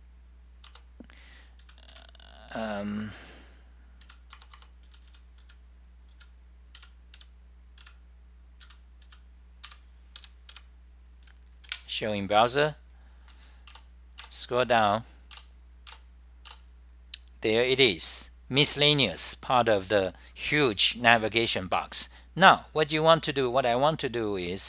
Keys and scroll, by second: 0.5-1.3 typing, 4.3-11.2 typing, 13.2-13.9 typing, 23.5-24.3 typing.